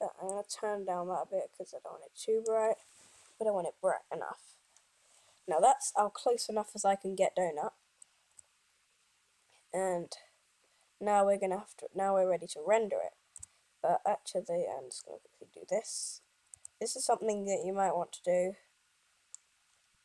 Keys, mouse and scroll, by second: 11.6 n.